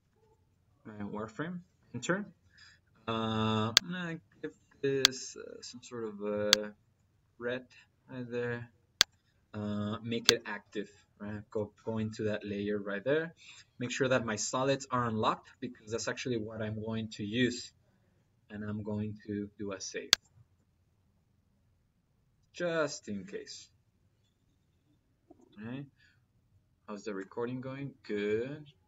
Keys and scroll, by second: 0.1 m, 1.6 Return.